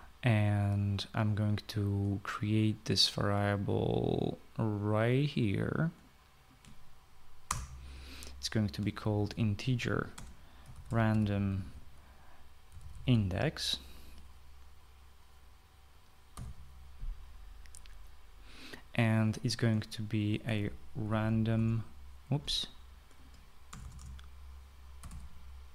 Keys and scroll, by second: 8.3 Return, 9.7-14.4 typing, 17.1 =, 20.7-22.5 typing, 24.5-25.7 typing.